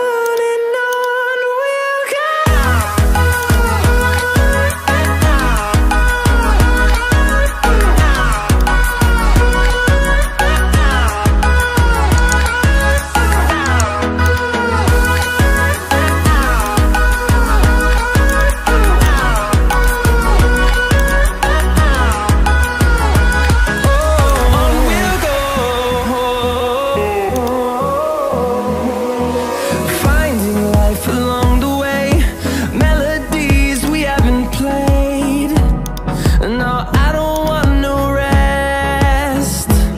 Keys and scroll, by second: 4.7 ctrl+i, 7.3 ctrl+alt+z, 38.6 ctrl+i.